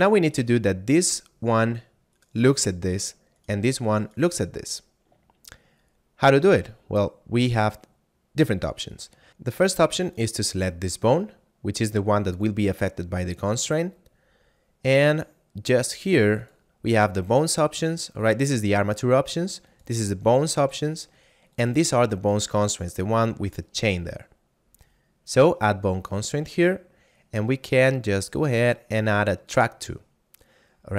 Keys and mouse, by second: 0.3 right click, 5.4 shift+middle click, 6.7 middle click, 9.3 F9, 10.1 right click, 16.1 click, 25.8 click, 29.4 click.